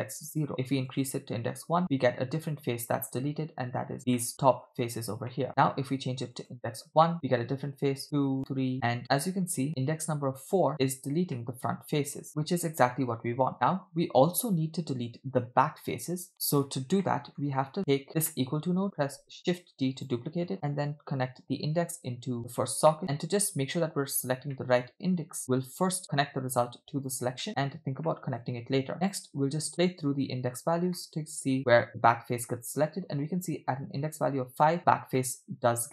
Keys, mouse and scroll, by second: 0.9 click, 1.8-3.9 middle drag, 4.2 middle click, 5.3 middle click, 6.3 click, 7.1 middle click, 8.0 click, 8.4 click, 8.9-10.7 middle drag, 11.4-13.0 middle drag, 13.5-15.4 middle drag, 16.6-17.0 scroll down 2, 17.1 middle click, 17.9 click, 18.3 middle click, 19.1 shift+d, 21.0 click, 21.4-22.4 drag, 22.9 middle click, 24.6 middle click, 25.4-27.2 drag, 27.5 middle click, 28.1 middle click, 29.0 click, 29.7 middle click, 31.0-32.1 middle drag, 35.2 middle click.